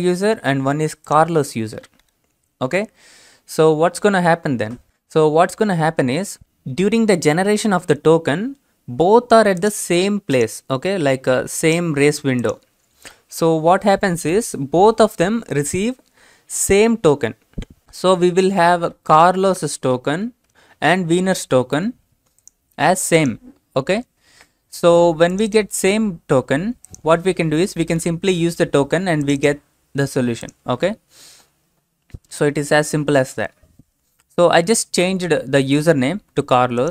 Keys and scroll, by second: 17.8-21.0 typing.